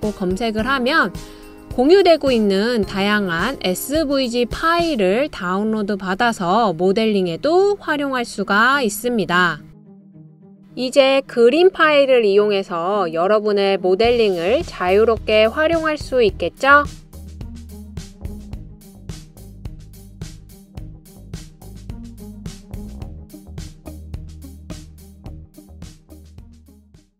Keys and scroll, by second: 0.0 v, 2.2-2.9 typing.